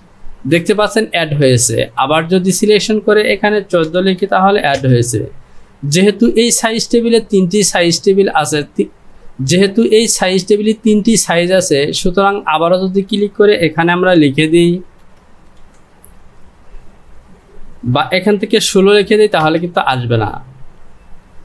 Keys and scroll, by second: 4.0 KP_1, 4.1 KP_4, 4.8 Return, 15.1 KP_1, 15.6 KP_5, 17.9 BackSpace, 18.7 KP_6, 19.5 Return.